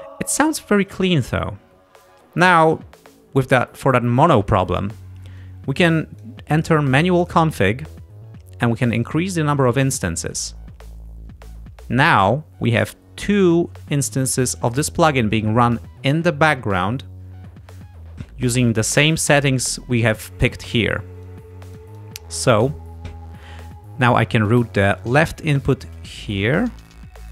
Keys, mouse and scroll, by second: 5.4-6.5 drag, 7.3 click, 10.5 click, 18.8 click, 21.3-22.8 drag, 25.1-27.2 drag.